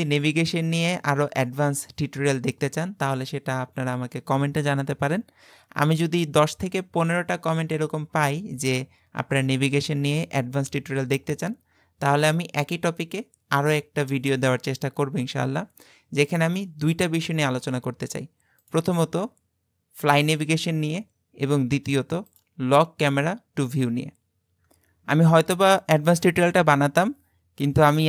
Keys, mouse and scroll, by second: 18.6-21.6 drag, 22.4 click.